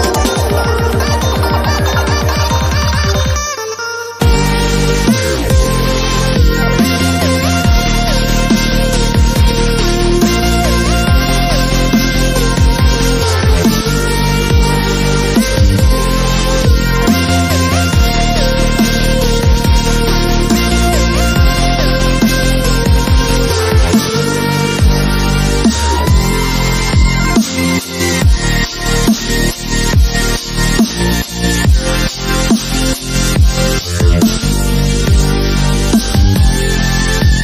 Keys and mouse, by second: 1.0 ctrl+l, 1.1 s, 2.1 g, 2.5 click, 4.4 s, 4.9 click, 5.6 g, 5.8 click, 6.1 ctrl+l, 6.4 g, 6.6-6.9 drag, 7.2 g, 7.7-8.5 drag, 8.6-9.0 drag, 9.0 ctrl+l, 9.2 s, 10.5-11.2 drag, 11.2 s, 12.1 g, 13.2 g, 14.7 g, 15.5 s, 16.2 g, 16.5-16.9 drag, 16.7 g, 17.1 click, 17.7 Tab, 18.2 Tab, 18.5 KP_1, 18.6 KP_5, 19.8 ctrl+l, 20.3 ctrl+z, 20.5 ctrl+l, 20.6 ctrl+l, 20.8 ctrl+KP_Add, 21.9 ctrl+z, 22.1 shift+d, 23.2 click, 23.5 ctrl+KP_Add, 23.9 g, 24.4 shift+d, 25.7-29.4 typing, 27.5 click, 29.6 ctrl+s, 30.2 middle click, 30.8 Tab, 31.9 Tab, 32.4 click, 32.7 ctrl+l, 33.9 g, 36.3 ctrl+Tab, 37.0 ctrl+e, 37.2 click.